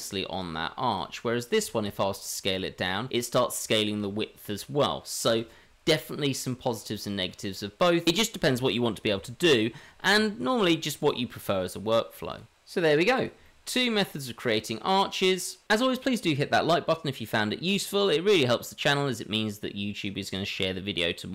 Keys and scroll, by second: 2.5 s, 4.0 s, 5.2 ctrl+z, 8.0 ctrl+z, 9.1 Tab, 10.1 Tab, 12.4 ctrl+z, 12.4 g, 13.4 g.